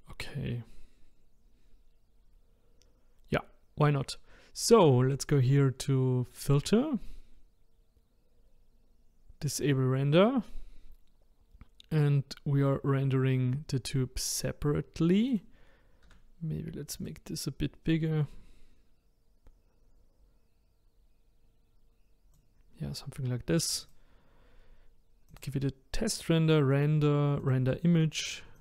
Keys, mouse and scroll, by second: 2.5-3.1 scroll down 2, 3.1-3.8 scroll up 1, 3.8-4.4 scroll up 1, 4.4-6.3 scroll up 1, 6.5-9.6 drag, 11.9 click, 15.3 click, 16.1 s, 17.9 click, 23.8 click, 25.3-28.6 drag.